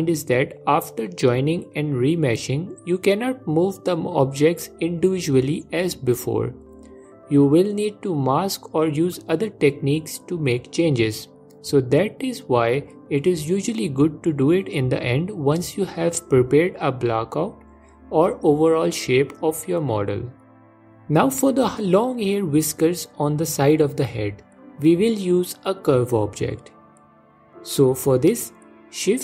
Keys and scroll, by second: 6.3 f, 7.8 ctrl+z, 9.9 f, 12.6 ctrl+z, 18.2 ctrl+Tab, 25.6 shift+a.